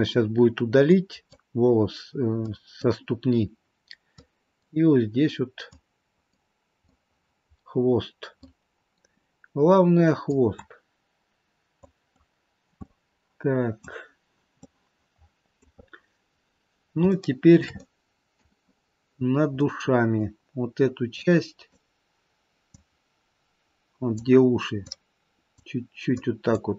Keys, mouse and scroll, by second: 1.1 click, 2.6 click, 4.4 click, 5.8 click, 6.8 middle click, 7.8-8.4 scroll down 3, 8.4 middle click, 10.5 click, 11.9 click, 12.8 middle click, 14.5 middle click, 15.8-16.9 scroll up 5, 17.1 shift+middle click, 17.7 middle click, 18.7 scroll up 2, 19.9 middle click, 21.3 click, 23.0 click, 25.0 click, 26.3 click.